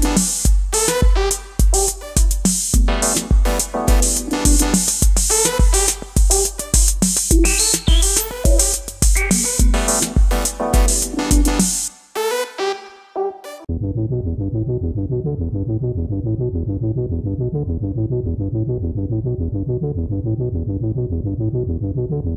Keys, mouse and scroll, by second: 11.5-14.2 typing, 16.8-19.4 typing, 21.0 double click.